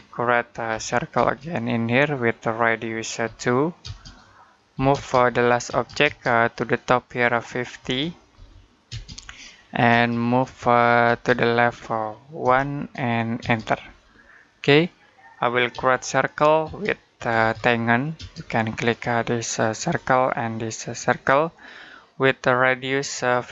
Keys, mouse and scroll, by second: 0.5 c, 1.0 space, 1.9 click, 3.1-5.5 typing, 6.2 click, 7.6-9.7 typing, 9.3 middle click, 10.2 click, 10.9 space, 11.1 click, 12.2 1, 13.2 space, 13.9 scroll down 1, 14.2 middle click, 15.5-18.0 typing, 19.6 click, 23.3-23.5 typing.